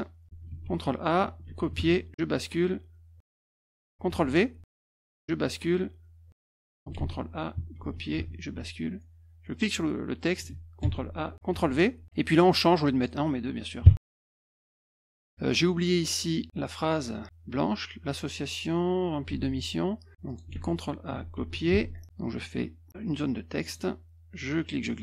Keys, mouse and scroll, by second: 0.5 ctrl+a, 1.4 ctrl+c, 1.7 alt+Tab, 3.2 ctrl+a, 3.2 t, 4.0 ctrl+v, 5.0 alt+Tab, 6.9 ctrl+a, 7.8 ctrl+c, 8.1 alt+Tab, 9.5 click, 10.8 ctrl+a, 11.5 ctrl+v, 12.7 click, 13.8 2, 14.8 -, 14.9 -, 19.3 alt+Tab, 20.2 click, 20.5 ctrl+a, 21.3 ctrl+c, 21.7 alt+Tab, 23.6 click, 24.5-25.0 drag.